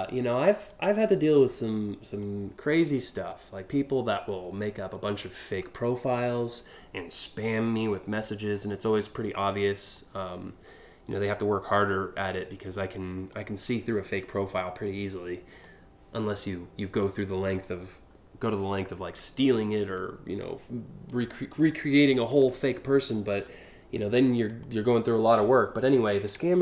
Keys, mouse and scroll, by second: 0.3-1.8 drag, 2.9-4.5 drag, 7.8 scroll down 1, 8.2 scroll up 3, 9.6-11.4 drag, 11.8 click, 12.9 click, 14.5-15.2 drag, 19.6 click, 20.7 click, 21.5-22.1 scroll down 3, 22.8-24.1 scroll up 5, 24.1 click, 25.5 ctrl+click.